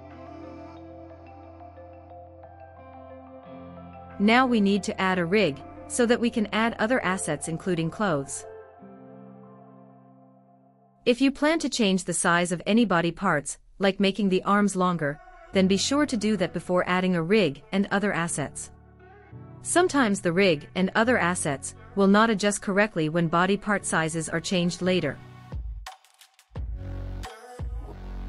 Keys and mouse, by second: 0.2-1.0 shift+middle drag, 1.6-2.3 shift+middle drag, 4.8 click, 5.5 right click, 6.8 right click, 7.5 right click, 8.7-9.9 right drag, 10.7 right click, 13.9-15.5 drag, 16.7 click, 18.8 click, 19.5 click, 20.5-21.5 drag, 22.1 click, 23.2 click, 24.0 click, 26.9 click.